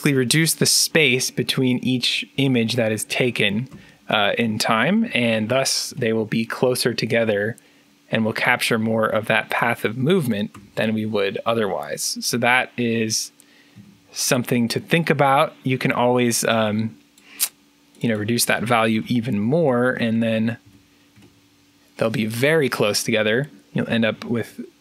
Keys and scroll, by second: 4.6-6.3 typing, 7.5-8.2 typing, 10.4 3, 13.7 3, 18.9 5, 19.5 Return, 20.0 1, 20.5 2, 21.1 3, 23.8 3.